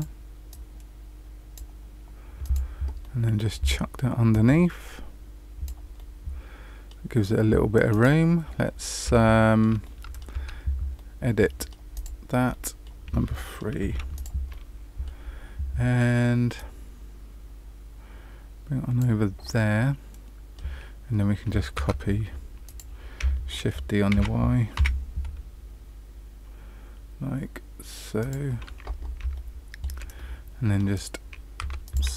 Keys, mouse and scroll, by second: 0.4 click, 2.4 click, 3.0 middle click, 4.2 click, 5.9 middle click, 7.8 click, 8.6-9.1 scroll up 2, 9.1 shift+middle click, 9.8 middle click, 10.7 Tab, 10.9 middle click, 11.9 click, 12.4 middle click, 13.2 middle click, 13.8 3, 14.1 click, 14.4-14.8 scroll up 1, 14.8 middle click, 15.2-16.5 scroll down 1, 16.5 click, 19.5 middle click, 21.7 Tab, 22.6 click, 24.1 shift+d, 29.3 shift+middle click, 30.1 middle click, 31.5 Tab, 31.8 click.